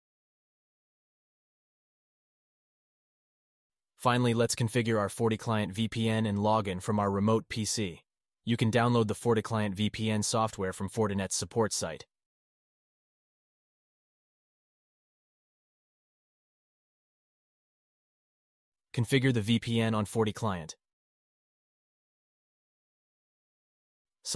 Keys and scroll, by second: 2.0 alt+q, 8.0 alt+q.